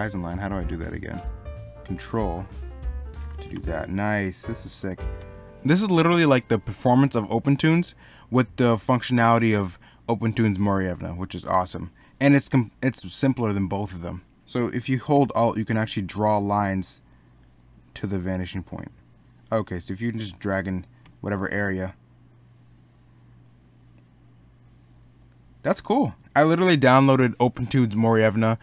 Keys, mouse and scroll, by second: 6.8 middle click, 10.9 middle click, 26.2 middle click.